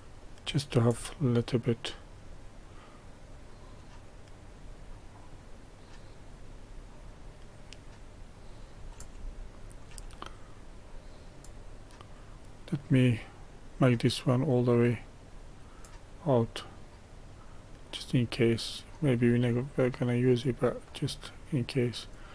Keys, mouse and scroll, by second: 9.3 shift+middle click, 10.1-19.7 drag, 20.6-22.3 drag.